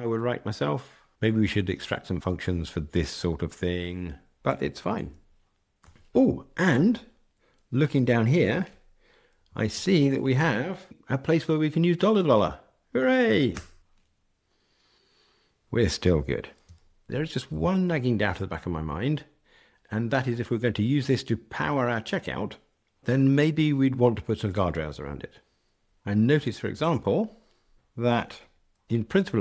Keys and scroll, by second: 9.7 alt+Return, 13.8 ctrl+r, 26.7 super+e.